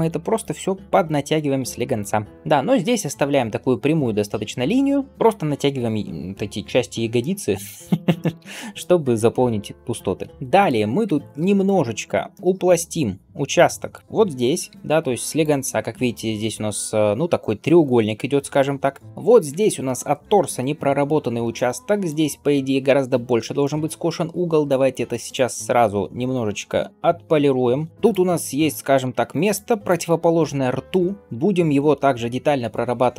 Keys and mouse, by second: 1.3 click, 1.3 middle click, 2.2 g, 2.3 g, 4.2 click, 4.2 middle click, 9.3 click, 10.1 g, 10.9 Tab, 13.3-15.4 drag, 13.3-15.4 middle drag, 14.5 g, 24.6-33.1 drag, 24.6-33.1 middle drag.